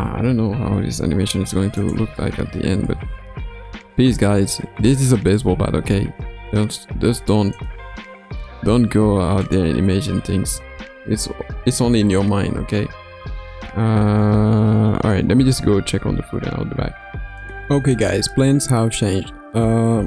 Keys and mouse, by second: 0.9 ctrl+s, 1.8 click, 2.3 space, 5.9 space, 7.5 click, 9.5 click, 9.9 space, 12.9 space.